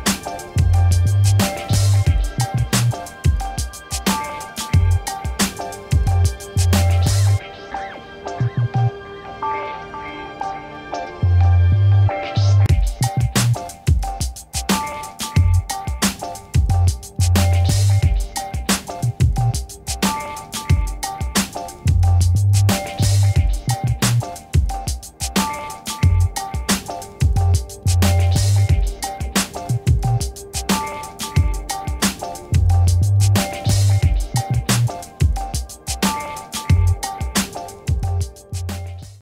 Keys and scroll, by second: 4.4 5, 9.4 ctrl+s.